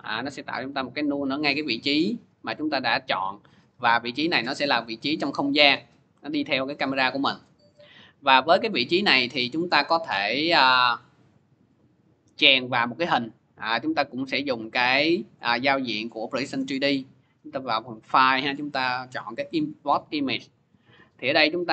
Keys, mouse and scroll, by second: 0.3 s, 2.3 click, 5.0 click, 6.3 click, 10.6 click, 11.8 click, 12.8 click, 15.2 click, 17.5 click, 19.7 click, 21.3 click.